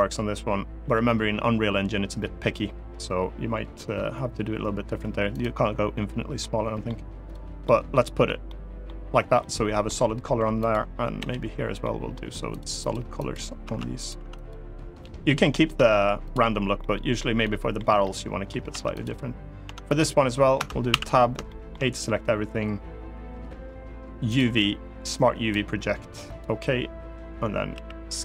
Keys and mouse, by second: 0.5 g, 5.0 click, 6.1 middle click, 7.3 middle click, 8.2 middle click, 9.1 middle click, 10.9 l, 11.5 middle click, 12.2 click, 12.6 click, 13.0 click, 13.4 Tab, 13.7 click, 13.9 Tab, 14.2 click, 14.9 l, 15.5 Tab, 16.5 middle click, 17.1 middle click, 17.7 middle click, 18.4 Tab, 18.6 click, 19.4 Tab, 19.7 click, 20.3 Tab, 20.6 a, 21.2 shift+middle click, 24.2-26.1 drag, 27.4 s.